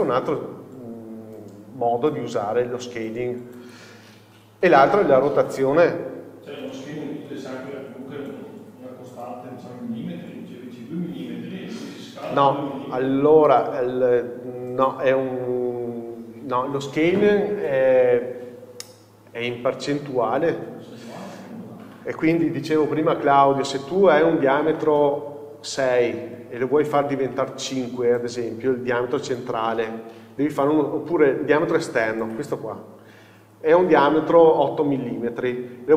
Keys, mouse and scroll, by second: 6.7 Tab.